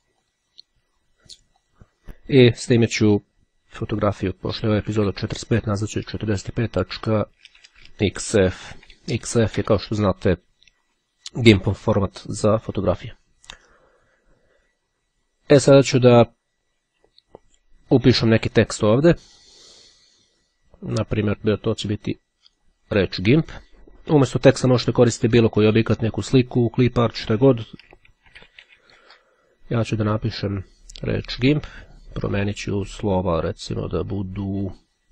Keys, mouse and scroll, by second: 0.3 click, 1.7 click, 2.0-2.8 typing, 6.1 End, 6.3 BackSpace, 8.7 c, 9.1 Return, 17.9-19.2 drag, 21.9-23.1 drag, 27.2-29.1 typing, 31.6 click, 34.9-35.1 drag.